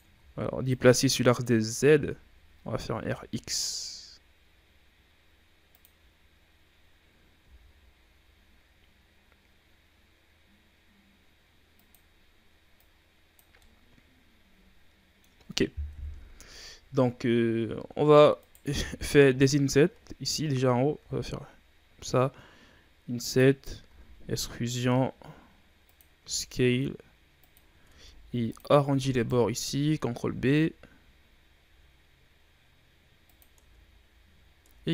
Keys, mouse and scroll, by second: 0.0 ctrl+z, 0.6-1.8 drag, 1.8 r, 6.7-7.0 scroll down 2, 7.3 s, 12.7 click, 13.5-15.8 middle drag, 15.8 KP_1, 17.1-17.7 scroll up 3, 17.7 shift+scroll down 1, 17.9-18.3 scroll up 3, 18.3 right click, 18.7 ctrl+Tab, 23.8 e, 26.1 s, 27.8 ctrl+Tab, 29.0 alt+right click, 30.2 ctrl+b, 33.5 Tab, 34.6 Tab.